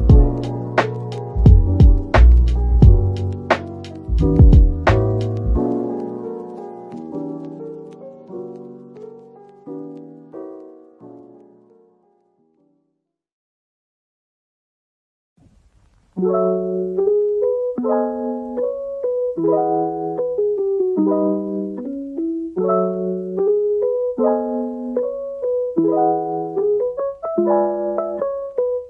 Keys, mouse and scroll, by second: 1.8 right click, 4.0 middle click, 5.7-6.1 scroll down 1, 6.2 Tab, 6.6 middle click, 7.2 Tab, 9.4 Tab, 10.4 ctrl+r, 10.8 scroll up 1, 12.1 scroll down 1, 13.0 typing, 15.0 typing, 17.9 alt+click, 19.8 alt+click, 20.3 typing, 24.1 typing, 24.4 middle click.